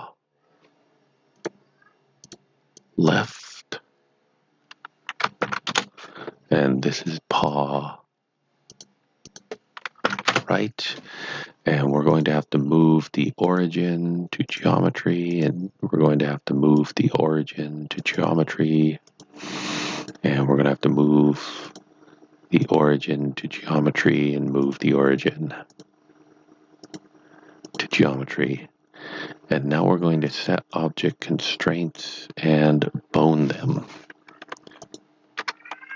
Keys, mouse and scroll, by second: 1.4 click, 2.2 click, 5.7 Return, 7.3 click, 8.7 click, 10.2 r, 10.3 Return, 12.0 click, 13.4 click, 16.8 click, 21.7 click, 30.2 click, 34.4 click, 34.5 Caps_Lock, 34.8 click, 35.0 Caps_Lock.